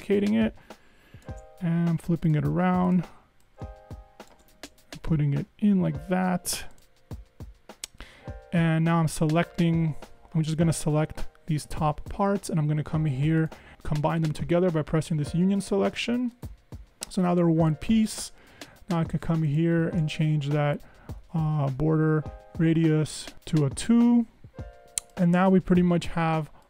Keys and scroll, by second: 5.2 Up, 5.4 Up, 13.7 super+z, 20.6 Up, 21.2 Up, 21.7 Up, 22.5 Up, 23.1 Up.